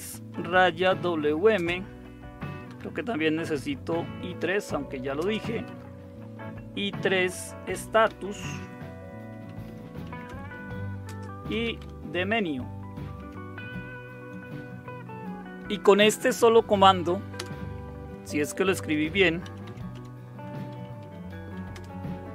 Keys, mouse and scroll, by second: 0.0-1.5 typing, 2.6 typing, 4.3-5.6 typing, 7.0-13.1 typing, 17.3 Return, 18.6-21.5 typing, 21.7 Return.